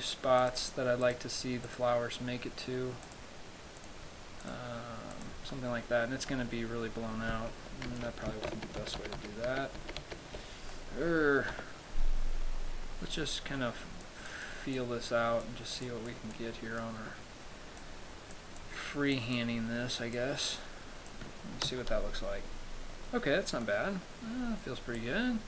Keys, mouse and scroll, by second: 0.7 click, 1.3 click, 1.8 click, 3.3 click, 4.0 click, 4.6 click, 5.3 click, 5.7 middle click, 6.5 middle click, 8.1 ctrl+z, 9.1 ctrl+z, 9.2 ctrl+z, 9.4 ctrl+z, 9.7 ctrl+z, 10.0 ctrl+z, 10.3 ctrl+z, 11.0 middle click, 11.8 KP_7, 13.3 click, 14.6 click, 15.0 click, 16.1 click, 16.6 click, 18.8 click, 19.6 click, 20.7 click, 21.9 KP_0, 22.9-23.4 scroll down 2, 23.8 middle click, 25.0 scroll up 2, 25.2 click.